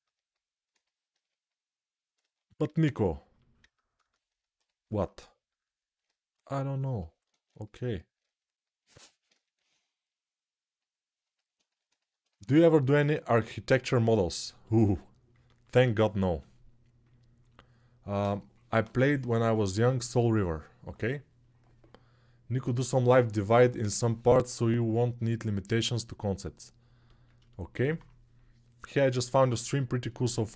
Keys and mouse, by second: 1.3 click, 1.9-5.2 shift+middle drag, 2.4 shift+e, 5.2 right click, 5.3 middle click, 6.2 shift+right click, 6.6-30.5 middle drag, 7.0 ctrl+z, 9.3 shift+e.